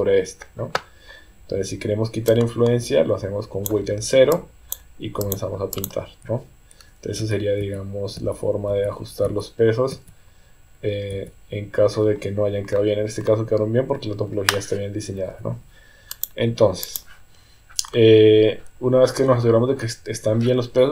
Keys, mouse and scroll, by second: 2.3-3.7 drag, 4.3 click, 5.2 click, 5.7 click, 7.4-12.0 ctrl+z, 16.2 click.